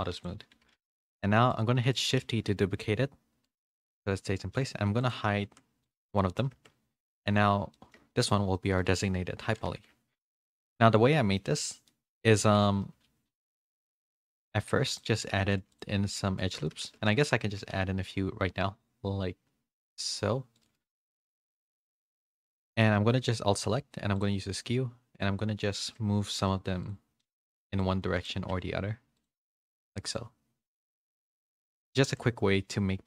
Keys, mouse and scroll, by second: 0.1 click, 0.9 middle click, 0.9 a, 1.5 click, 1.7 middle click, 2.2 shift+d, 5.0 click, 6.1 middle click, 6.1 h, 7.0 Tab, 7.0 middle click, 7.7 Tab, 7.7 middle click, 8.1 shift+middle click, 8.5 middle click, 9.5 a, 10.1 shift+middle click, 10.1 a, 11.3 shift+middle click, 11.8 middle click, 12.4 Tab, 13.0 ctrl+r, 16.8 ctrl+r, 16.8 ctrl+z, 17.4 ctrl+r, 17.4 ctrl+z, 20.9 middle click, 22.5 alt+2, 22.5 alt+click, 22.6 middle click, 24.1 click, 25.1 click, 26.8 alt+2, 26.8-28.2 drag, 29.1 click, 29.9 click, 31.8 alt+click, 32.7-33.0 drag.